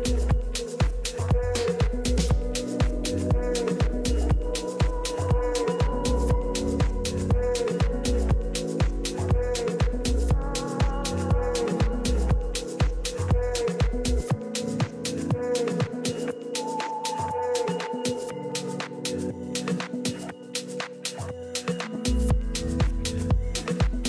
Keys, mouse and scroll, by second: 11.3 k.